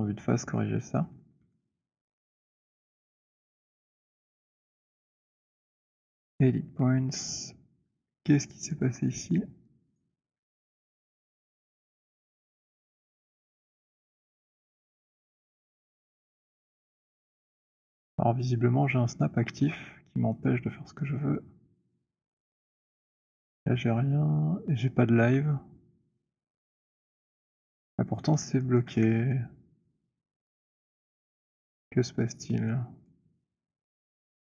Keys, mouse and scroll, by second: 4.2 alt+middle click, 6.3 right click, 7.0-7.5 scroll, 7.5-8.3 scroll, 9.1-10.3 alt+middle click, 9.1 scroll, 10.1 click, 11.0 alt+middle click, 14.5 click, 16.1-17.2 j, 17.7 click, 17.7 j, 20.6 click, 22.4 click, 23.1 click, 27.4 click, 29.0 middle click, 29.2 w, 31.5 click, 33.2 click.